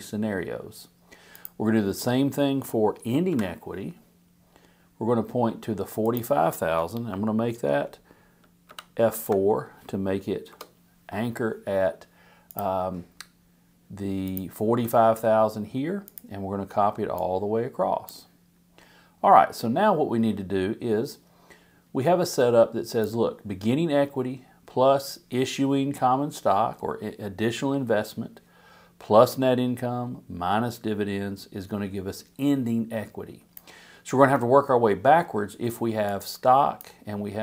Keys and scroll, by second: 3.3 =, 8.7 F4, 10.5 Return.